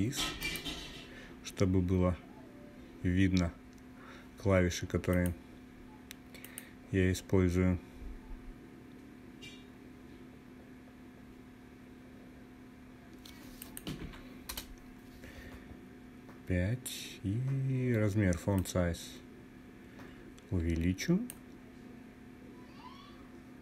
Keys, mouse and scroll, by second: 4.6-5.9 drag, 13.1-23.2 drag, 23.4-23.6 drag.